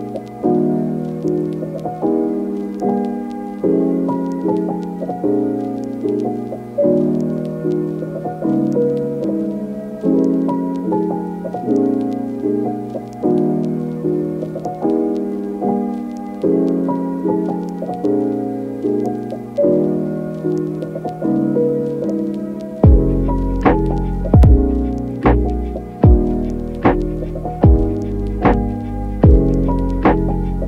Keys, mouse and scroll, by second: 0.0 ctrl+z, 0.8 click, 1.4 click, 2.1 click, 2.5 click, 3.1 ], 3.2 ], 3.7 ], 4.1 ctrl+z, 4.7 ctrl+z, 8.6 click, 9.1 alt+q, 9.6 shift+click, 10.5 shift+click, 11.3 ctrl+z, 11.4 click, 13.1 [, 13.2 click, 14.2 [, 14.3 [, 14.8 click, 15.5 ctrl+z, 15.6 ctrl+z, 15.7 ctrl+z, 16.3 ctrl+z, 16.7 click, 17.1 [, 17.3 [, 17.8 click, 18.9 ], 19.0 click, 19.0 ], 20.1 click, 21.1 ctrl+z, 21.1 [, 21.2 [, 23.2 middle click, 25.4 click, 26.1 alt+q, 26.8 ctrl+click, 27.4 click, 28.2 click, 29.1 click, 29.6 click, 30.3 ], 30.5 ].